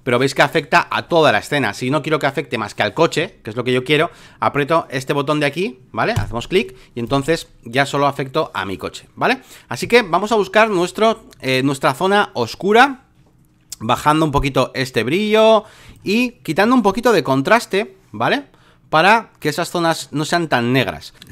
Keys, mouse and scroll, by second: 6.1-21.2 drag.